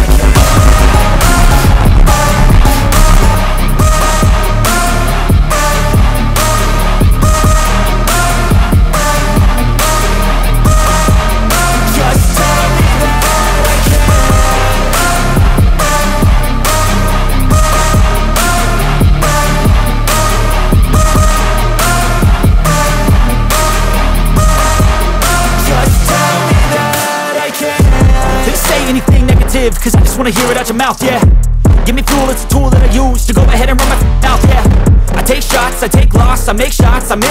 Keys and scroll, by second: 3.1 ctrl+z, 4.7 alt+c, 5.1 p, 10.9 F2, 20.4 F3, 20.9 Escape, 21.4 F2, 31.6 Escape, 37.2 space.